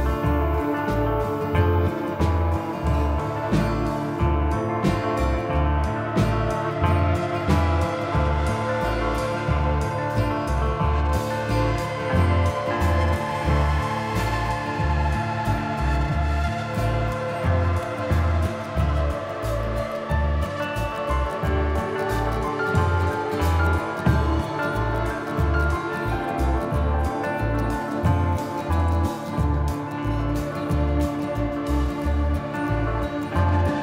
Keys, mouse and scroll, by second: 1.3 shift+middle click, 1.7-2.2 scroll up 6, 2.3 shift+middle click, 2.6 middle click, 4.4 click, 6.0 middle click, 6.4-7.0 scroll down 6, 7.0 middle click, 7.8 shift+middle click, 8.9 middle click, 10.3 shift+d, 12.7 middle click, 13.2 scroll up 2, 13.4 middle click, 14.5 click, 15.9 middle click, 17.0 click, 18.1 middle click, 18.9 click, 19.9 middle click, 21.9 ctrl+KP_1, 22.7-23.0 scroll down 4, 23.1 shift+middle click, 23.7 z, 24.5-25.5 scroll up 4, 25.7 shift+middle click, 26.4 shift+middle click, 27.1 scroll up 2, 27.9 shift+middle click, 28.1-28.7 scroll up 2, 28.8 g, 29.9 s, 33.0 scroll down 1.